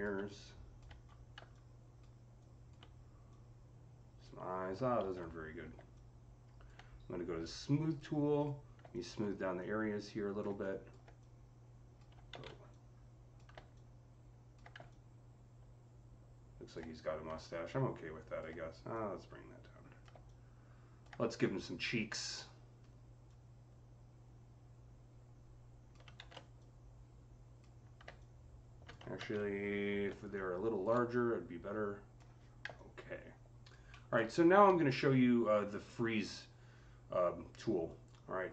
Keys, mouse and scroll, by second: 0.8 scroll up 4, 1.5-9.4 alt+drag, 4.8 ctrl+z, 9.4-11.0 alt+drag, 11.0-14.8 drag, 12.2 ctrl+z, 14.8-23.1 alt+drag, 23.1-30.2 alt+drag, 26.0 ctrl+z, 29.0 ctrl+z, 29.9-31.0 typing, 30.2 click, 31.0-37.1 drag, 33.7 alt+middle click, 37.7 alt+click, 37.7 alt+middle click.